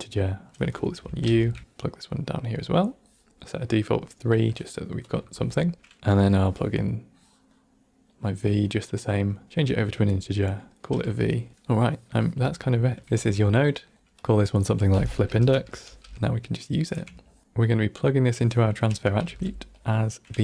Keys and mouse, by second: 0.0-2.4 drag, 3.8 click, 4.0 click, 5.0 click, 5.1 x, 6.0 ctrl+z, 6.3-8.1 drag, 9.1 click, 9.4-10.1 drag, 10.5 click, 11.5 click, 11.5 right click, 11.5 n, 11.5 middle click, 12.0 middle click, 12.6 ctrl+middle click, 13.1 Tab, 13.6 middle click, 14.1-16.2 drag, 17.2 ctrl+middle click, 17.4 click, 18.3 middle click, 19.0 a, 19.1 g, 19.9 middle click.